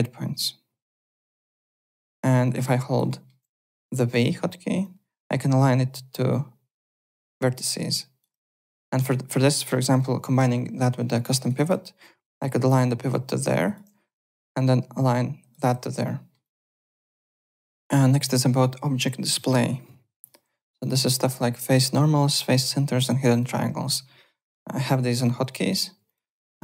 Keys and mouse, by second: 1.4 x, 1.7 click, 2.6 click, 3.1 alt+middle click, 4.1 v, 4.8 click, 8.2 v, 8.5 click, 11.1 alt+middle click, 11.3 alt+right click, 11.7 f, 12.6 click, 12.6 f, 13.5 click, 14.1 v, 14.6 click, 14.6 v, 15.5 v, 16.0 middle click, 16.4 click, 20.2 click, 20.7 `, 20.8 click, 21.0 alt+click, 21.4 alt+Tab, 23.3 click, 24.8 7, 25.6 7, 26.0 click.